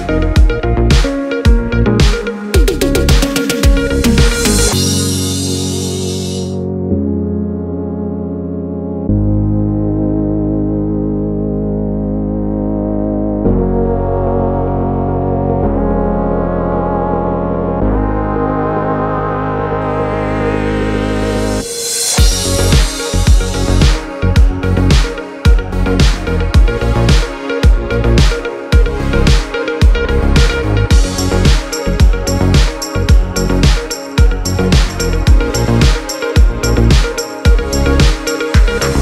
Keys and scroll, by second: 11.3 space, 19.3 space, 24.7 x.